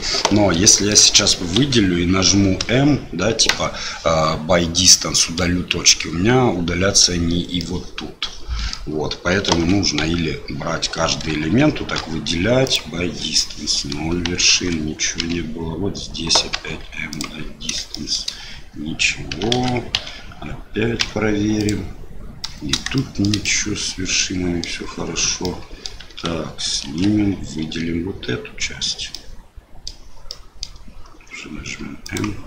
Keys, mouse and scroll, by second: 0.7 shift+click, 1.6 a, 2.6 m, 5.1 middle click, 7.6-8.7 middle drag, 9.5 alt+a, 10.0 l, 11.9 m, 14.5 alt+a, 15.2 l, 16.5 m, 17.9 shift+middle click, 19.5 alt+a, 19.9 l, 21.0 m, 22.4 middle click, 22.9 shift+middle click, 23.4-24.6 middle drag, 25.4 middle click, 26.8 alt+a, 27.6 l, 29.2 middle click, 30.4 middle click, 31.1 m.